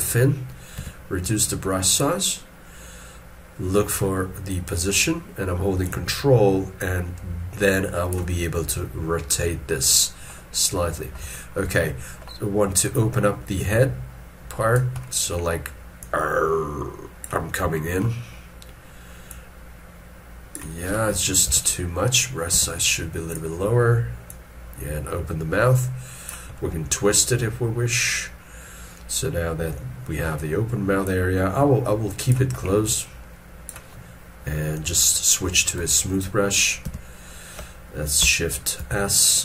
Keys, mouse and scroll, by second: 0.8 f, 5.8 ctrl+click, 8.4 scroll down 1, 11.0 scroll up 1, 11.3 shift+middle click, 17.7 shift+middle click, 21.5 ctrl+z, 26.5 middle click, 38.8 shift+s.